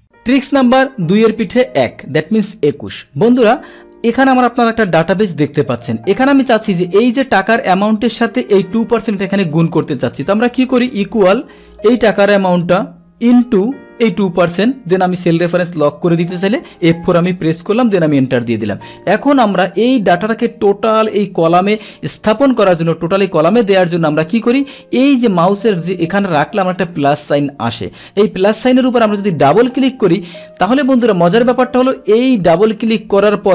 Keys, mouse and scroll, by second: 7.0 click, 7.7 click, 8.4 click, 9.5 click, 11.7 click, 14.5 click, 16.1 F4, 18.1 Return, 19.2 click, 29.4 click, 29.5 click.